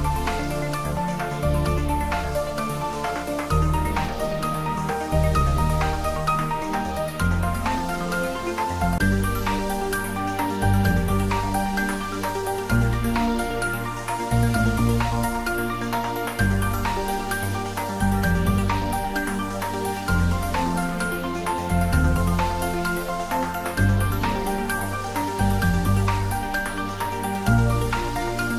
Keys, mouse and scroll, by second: 3.0 click, 4.8-5.5 scroll down 1, 11.5 click, 13.7 click, 19.0-19.9 typing, 20.5 Return, 22.4 click.